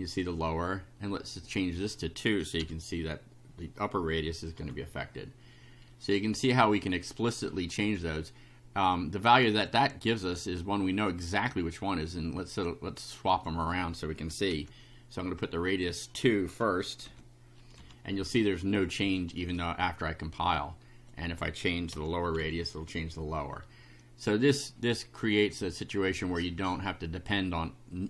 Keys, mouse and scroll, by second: 1.5 click, 2.6 2, 4.6 F5, 7.4 click, 8.9 click, 9.6 click, 10.3 click, 11.5-12.8 drag, 13.3 click, 14.5 ,, 15.4 click, 17.1 Delete, 17.8 F5, 20.5 click, 21.9 3, 22.4 F5, 25.5-27.0 drag.